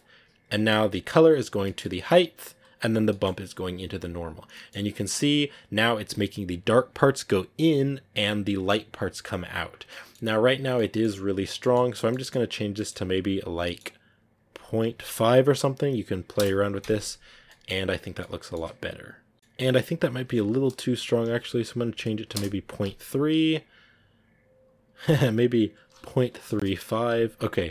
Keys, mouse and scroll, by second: 0.0 click, 0.1-0.4 scroll down 8, 0.4 middle click, 1.2 scroll down 1, 1.4-3.5 middle drag, 2.5-3.5 scroll down 1, 4.0 scroll up 2, 4.4 middle click, 4.8-5.7 scroll up 2, 5.8-6.6 scroll down 4, 6.9-7.4 scroll up 3, 8.6 scroll up 1, 8.7 scroll down 2, 10.4 middle click, 11.1 scroll down 2, 11.5 middle click, 11.7-12.7 scroll up 3, 12.7-14.8 middle drag, 16.3-17.7 drag, 17.7 middle click, 18.8-19.4 scroll up 3, 19.3 a, 22.2-23.4 drag, 23.4 scroll up 2, 24.7 click, 26.4-27.7 drag.